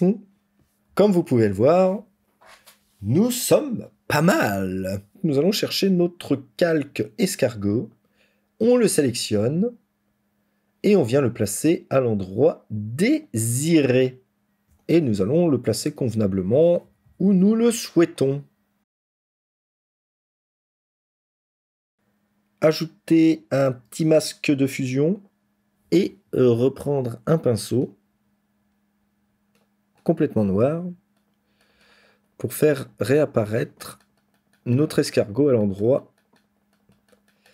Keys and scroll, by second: 0.8 ctrl+-, 16.7 ctrl++, 16.9 ctrl++, 17.1 ctrl++.